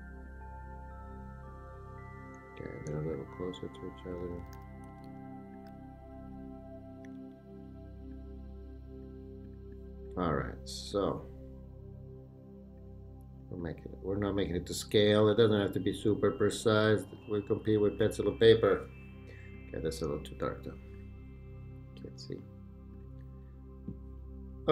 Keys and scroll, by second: 4.2 Right, 4.9 Left, 5.7 Right, 7.1 Up, 7.6 Down.